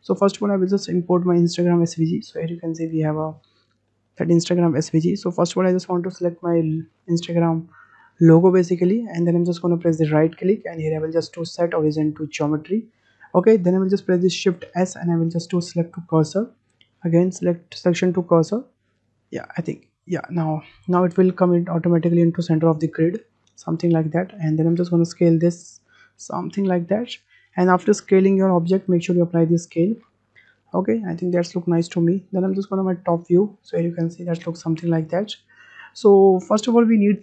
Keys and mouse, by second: 2.2 shift+click, 2.8 shift+drag, 3.2-3.8 middle drag, 4.0 shift+click, 6.6 shift+drag, 8.9 shift+click, 10.2-12.4 drag, 23.1 drag, 23.3 middle click, 23.7 middle click, 24.9 s, 28.7 ctrl+a, 30.3-31.6 drag, 31.9 `, 33.5-35.4 shift+middle drag, 35.7-36.1 shift+middle drag.